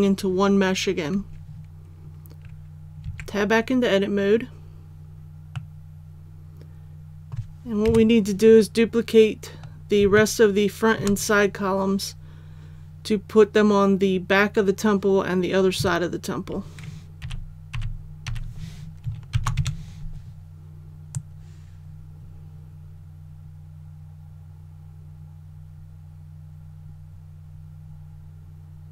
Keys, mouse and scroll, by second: 3.0 Tab, 5.6-7.9 middle drag, 7.9 KP_7, 8.9-10.0 scroll down 1, 10.2 shift+middle click, 17.2-18.3 typing, 19.3 shift+d, 21.2-28.9 drag.